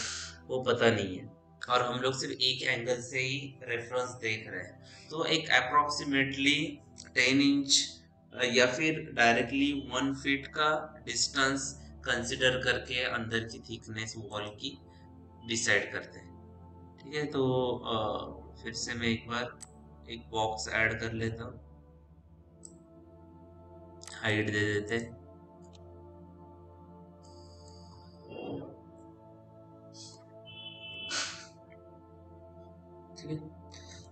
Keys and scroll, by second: 26.2 f.